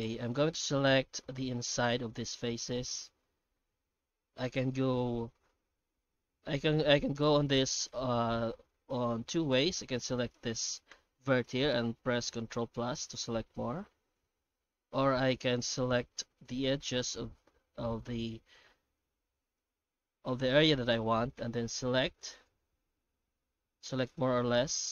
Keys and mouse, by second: 0.4 shift+middle click, 7.3 middle click, 7.9-9.4 shift+middle drag, 9.8 1, 10.2 right click, 12.7 ctrl+KP_Add, 13.0 ctrl+KP_Add, 13.4 ctrl+KP_Add, 13.8 ctrl+KP_Add, 15.0 alt+a, 16.5 2, 19.1 alt+shift+right click, 22.3-24.9 drag.